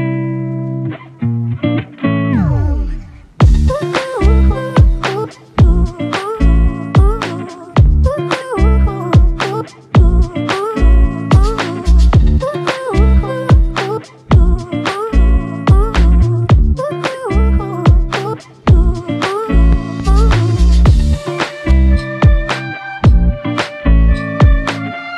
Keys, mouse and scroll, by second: 4.6 ctrl+scroll up 1, 8.3 ctrl+scroll down 1, 9.5 ctrl+click, 12.2 ctrl+click, 17.2 alt+click, 18.7 ctrl+click, 19.8 ctrl+click.